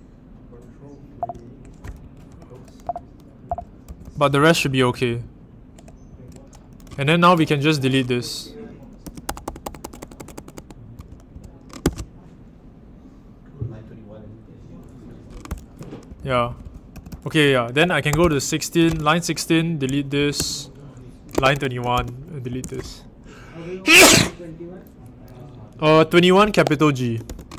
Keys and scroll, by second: 1.1 ctrl+d, 2.0 ctrl+alt+Right, 2.8 ctrl+d, 3.4 ctrl+k, 3.8 ctrl+u, 6.0 ctrl+u, 8.7-12.2 typing, 15.4-18.8 typing, 19.9-22.9 typing, 26.2-27.5 typing.